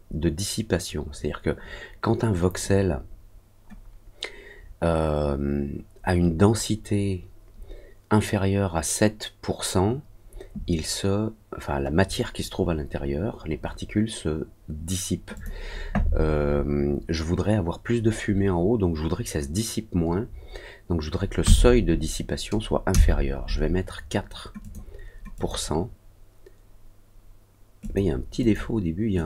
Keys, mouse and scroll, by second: 15.3 click, 24.5 click, 25.3 click, 27.7 click, 28.3 click, 29.1 click.